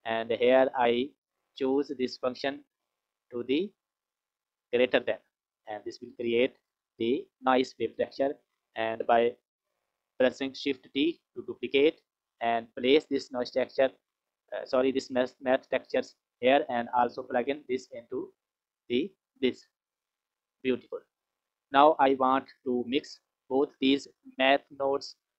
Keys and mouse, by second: 1.0-4.4 drag, 7.5 click, 8.5 click, 10.6 shift+d, 12.6 click, 13.3 click, 14.5 click, 15.0 click, 16.9-18.4 drag, 20.9 click, 22.0 click, 23.2 click, 24.2 click.